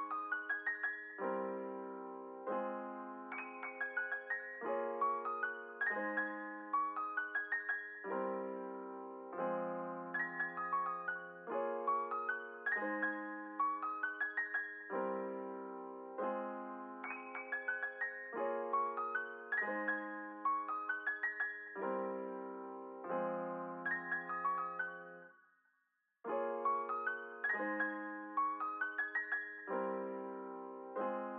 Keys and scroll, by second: 1.1 space, 7.0 space, 9.3 space, 9.7 ctrl+s, 14.5 space, 19.6 ctrl+s.